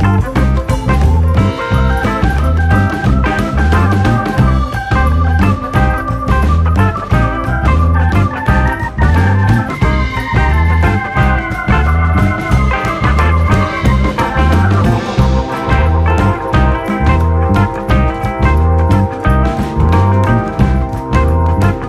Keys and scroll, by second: 9.1-10.0 scroll, 16.0-17.1 scroll, 20.8 s.